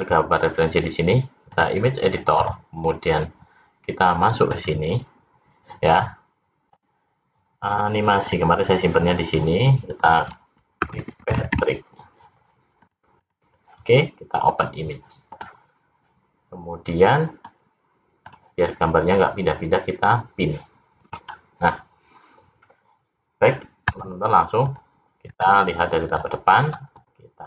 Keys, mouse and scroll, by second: 4.5 click, 17.4 click, 19.6 click, 21.2-22.7 scroll down 1, 23.9 `, 25.2 `.